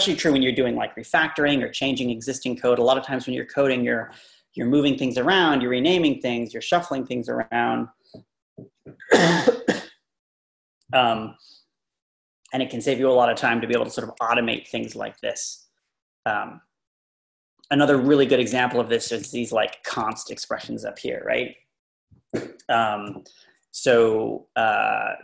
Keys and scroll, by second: 18.0-18.6 Up, 19.8 Left.